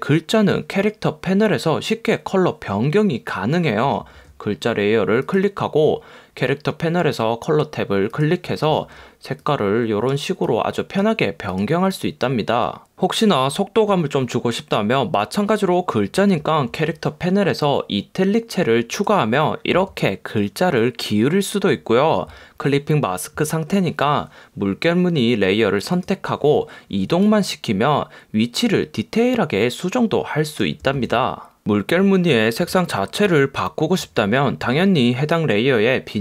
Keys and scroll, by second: 31.1 super+z.